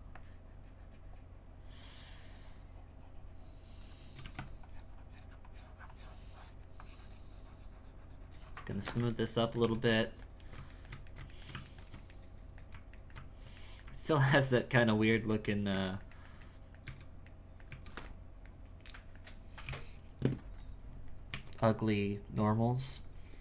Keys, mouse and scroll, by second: 4.6-9.2 shift+drag, 9.2 ctrl+middle click, 9.6 z, 10.1-13.0 ctrl+middle drag, 13.6 middle click, 14.6 middle click, 15.9 ctrl+middle click, 16.8 z, 17.3 middle click, 17.7 z, 18.1-19.6 middle drag, 19.6 KP_1, 21.3 Tab, 21.6-23.4 scroll down 3.